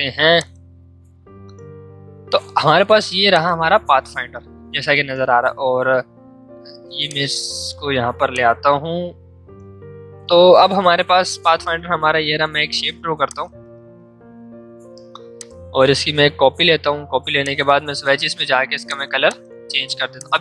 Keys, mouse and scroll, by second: 7.0-11.7 drag, 12.3 l, 13.2 shift+click, 14.3 v, 15.3-20.4 alt+drag.